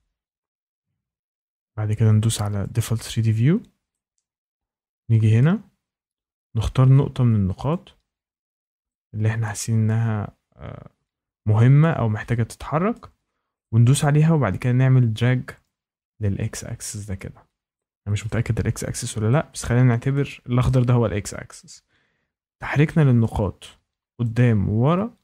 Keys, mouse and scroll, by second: 2.6 click, 5.3 shift+right click, 5.7-7.0 scroll, 7.6 click, 11.7 shift+middle click, 12.9 shift+middle click, 14.0 shift+middle click, 17.1 click, 18.2 shift+middle click, 20.1 shift+middle click, 23.1 shift+middle click, 24.2 click.